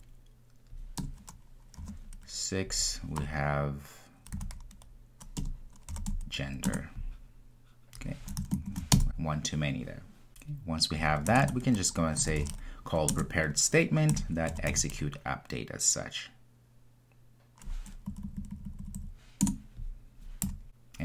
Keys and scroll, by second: 6.7 Return, 13.1 Return, 19.4 Return.